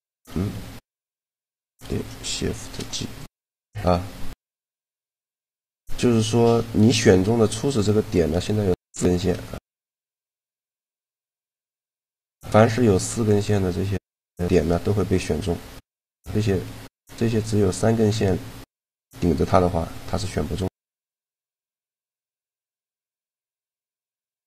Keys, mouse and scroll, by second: 0.9 shift+f, 2.3 shift+g, 6.5-8.4 right drag, 9.2 shift+g, 15.6-16.8 middle drag, 17.5-18.9 middle drag, 19.6-21.8 middle drag, 23.4-24.4 right drag.